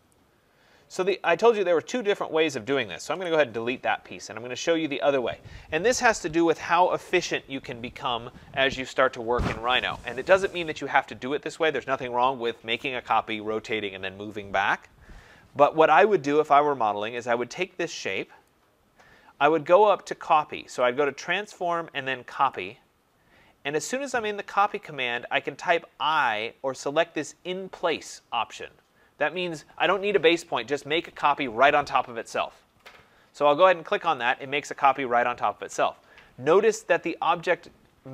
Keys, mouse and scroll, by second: 0.0 click, 0.9 click, 1.1 click, 3.1 Delete, 18.4 click, 21.0 click, 22.6 click, 34.1 click.